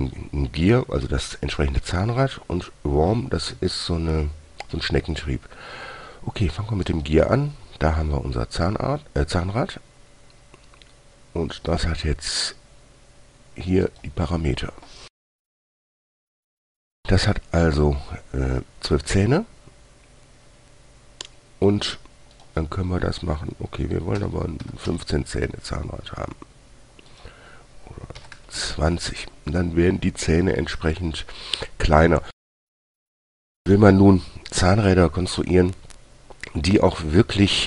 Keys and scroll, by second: 24.5-25.0 typing, 25.2 Return, 28.5-29.0 typing.